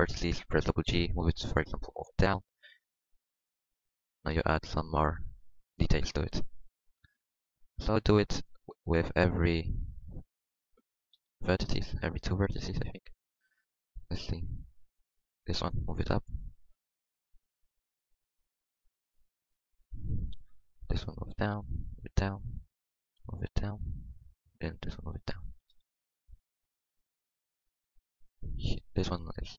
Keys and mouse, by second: 0.8 g, 2.3 Tab, 3.4-4.7 drag, 6.3 KP_1, 7.1 Tab, 11.1 g, 13.9 Tab, 14.8 Tab, 15.9 g, 16.5 Tab, 18.3 Tab, 18.6 Tab, 19.2 Tab, 20.9 g, 21.5 g, 23.1 g, 24.5 g, 25.8 z, 26.1 z, 26.4 Tab, 28.3 middle click, 29.1-29.5 middle drag.